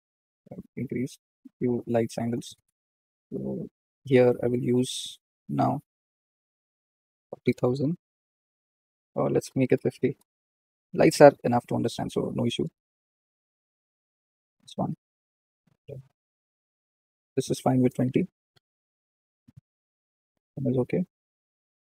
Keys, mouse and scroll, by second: 0.9-1.8 scroll down 13, 2.1-2.4 shift+middle drag, 2.4-3.5 scroll down 19, 3.5-4.3 shift+middle drag, 4.3 click, 8.2 KP_0, 10.1 KP_0, 11.0 click, 13.6 KP_0, 16.0 click, 18.7 KP_0, 20.7 click, 20.9-21.9 middle drag.